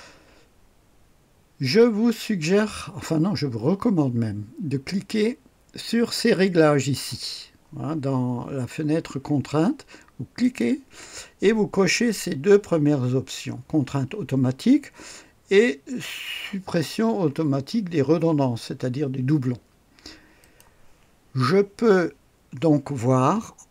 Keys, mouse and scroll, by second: 10.3 click, 20.3 click.